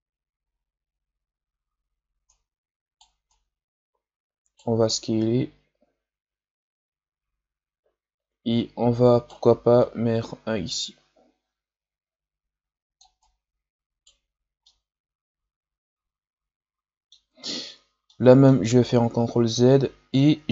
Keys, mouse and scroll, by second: 0.5-1.1 scroll down 2, 1.1-1.7 scroll up 4, 2.2-7.8 right drag, 9.7-12.7 drag, 13.1-14.6 right drag, 14.6-19.0 middle drag, 19.0 ctrl+z, 19.4-20.5 middle drag.